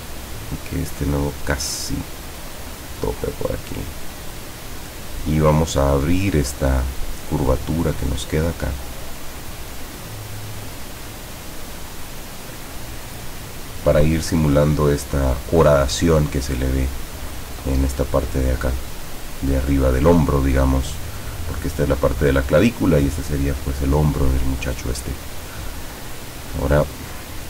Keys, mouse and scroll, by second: 3.1-4.8 drag, 6.1 click, 8.9 click.